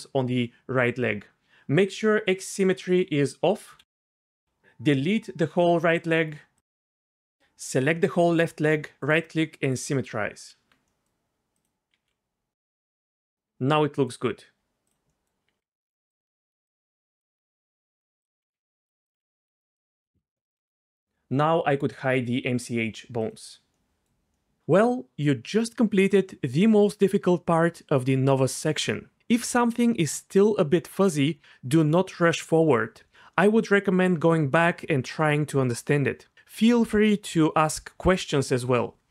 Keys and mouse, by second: 4.4 x, 6.8 ctrl+shift+z, 9.8 right click, 11.3 Tab, 12.4 click, 12.7 g, 15.5 r, 16.1 click, 16.2 r, 16.7 click, 16.8 r, 17.4 r, 18.0 click, 19.1 g, 20.8-23.2 middle drag, 23.2 click.